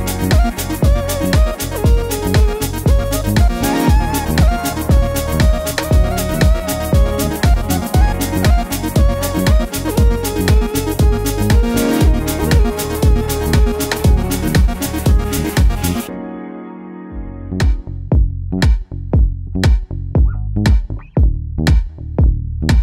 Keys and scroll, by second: 20.2 super+z.